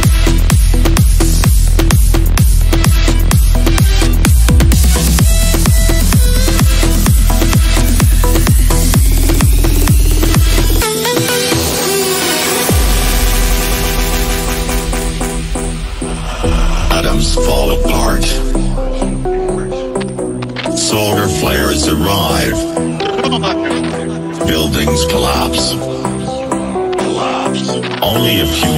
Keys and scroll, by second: 5.6 Delete, 6.8 Escape, 19.7 ctrl+z, 20.1 shift+F2, 24.5 shift+Page_Down, 27.2 F3, 27.3 Escape.